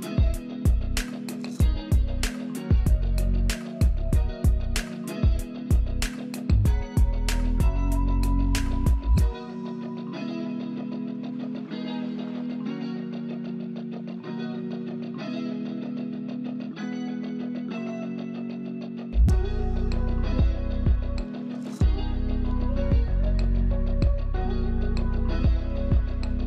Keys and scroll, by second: 3.1 space, 6.7 space, 10.7 space, 15.1 alt+space, 17.9 space, 21.7 space, 24.2 space.